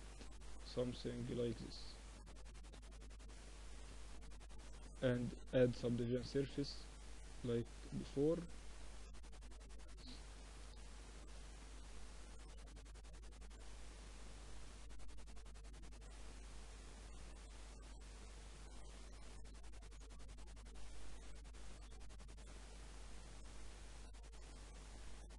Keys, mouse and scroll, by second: 1.8 z, 2.3 z, 3.1 ctrl+2, 4.0 t, 4.7 click, 5.0 t, 8.1-9.8 drag, 9.8-14.2 middle drag, 12.8 KP_2, 13.0 KP_2, 14.2-14.5 KP_8, 14.8 KP_8, 14.9 KP_8, 15.4 KP_8, 15.6-16.9 middle drag, 16.9-18.0 drag, 18.2 z, 19.3 KP_1, 19.8 z, 21.6 r, 24.3-25.3 drag.